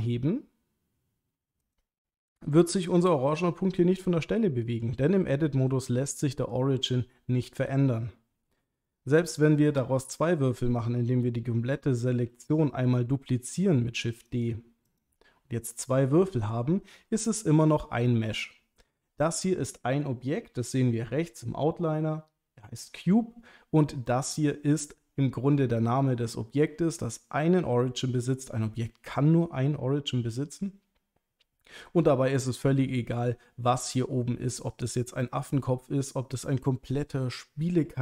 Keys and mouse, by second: 1.6 click, 2.3 middle click, 4.0 middle click, 9.0 middle click, 12.2 shift+d, 14.3 click, 15.0 click, 16.2 Tab, 18.4-20.0 middle drag, 24.1-24.4 middle drag.